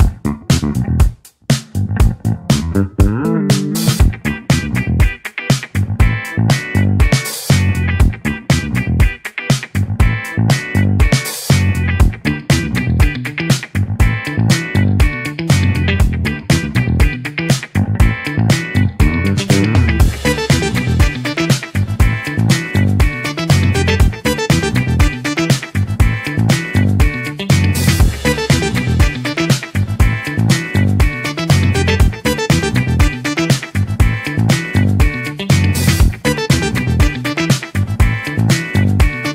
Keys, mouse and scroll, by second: 14.0-14.5 scroll up 2, 14.5-20.9 middle drag, 20.9 click, 38.1-39.3 middle drag.